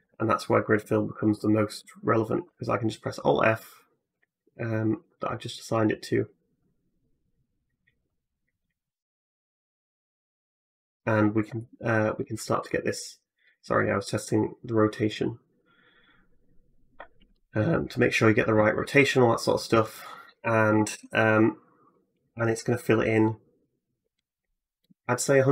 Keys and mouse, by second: 0.4 alt+click, 2.2 alt+f, 3.9-25.5 drag.